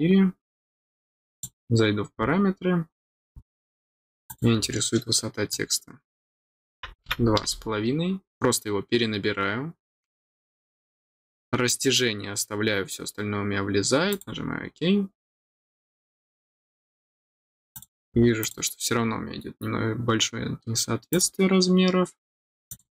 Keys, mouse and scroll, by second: 1.3 click, 4.2 click, 5.4 click, 14.0 click, 15.7-16.3 scroll down 6, 16.3 middle click, 17.0 middle click, 17.0 scroll down 1, 17.7 click, 18.4 click, 21.1 click, 22.6 click.